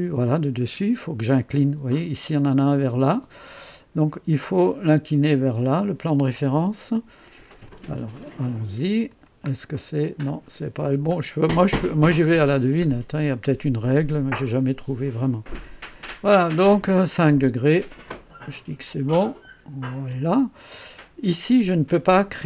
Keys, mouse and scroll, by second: 7.6-8.4 drag, 9.1 click, 9.6-10.0 scroll down 2, 10.2-10.7 scroll up 4, 11.7 click, 12.3-12.8 scroll down 1, 12.8 scroll up 1, 13.4-13.8 scroll up 1, 14.9 scroll up 2, 18.0-18.7 drag, 19.2 click.